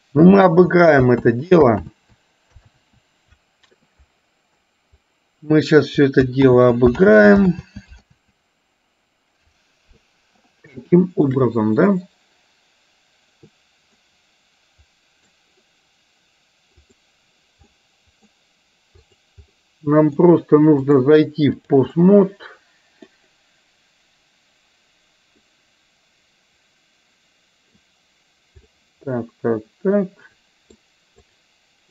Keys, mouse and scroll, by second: 0.5 ctrl+click, 0.7 ctrl+z, 1.4 ctrl+z, 2.5 ctrl+z, 3.9 ctrl+z, 6.7 ctrl+z, 7.4 ctrl+z, 7.9 ctrl+z, 9.1 ctrl+z, 10.8 shift+middle click, 14.2-15.4 middle drag, 16.8 click, 17.9 middle click, 19.7 middle click, 21.0 click, 22.0-23.2 middle drag, 25.5-27.9 middle drag, 28.8-30.9 middle drag, 31.3 click.